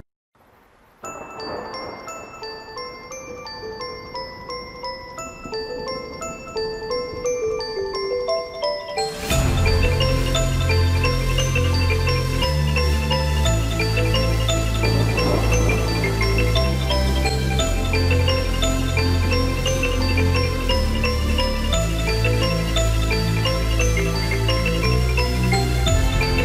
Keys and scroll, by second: 0.5 ctrl+t, 18.2 Return, 24.0 ctrl+t.